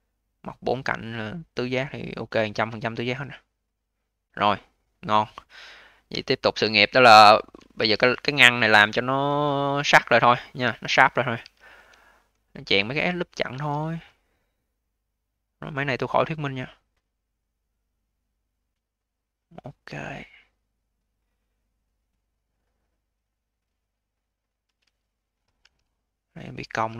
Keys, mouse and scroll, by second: 4.4 click, 6.0 d, 6.5-7.6 alt+drag, 7.6 q, 11.3 q, 11.9 alt+click, 12.4-12.8 scroll up 4, 12.8-13.4 alt+middle drag, 13.4 a, 19.4-20.0 scroll down 2, 20.0-20.4 alt+middle drag, 20.4-21.1 alt+drag, 21.1 alt+middle click, 21.5-22.7 alt+drag, 22.7 alt+middle click, 23.2-25.5 alt+drag, 25.5 q, 26.7 q.